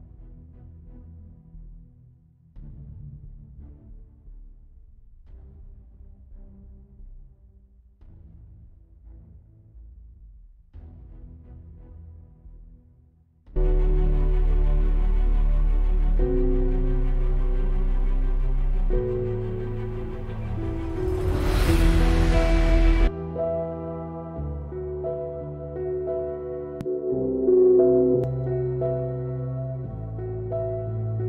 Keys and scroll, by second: 15.9 F8, 16.6 F8, 18.8 F7.